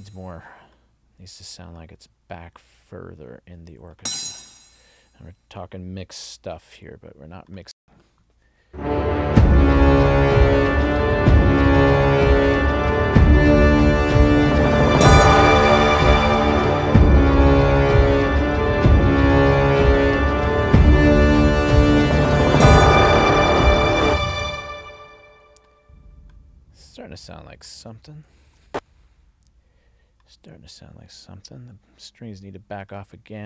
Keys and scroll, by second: 7.7 space, 24.0 space, 28.5 ctrl+alt+l.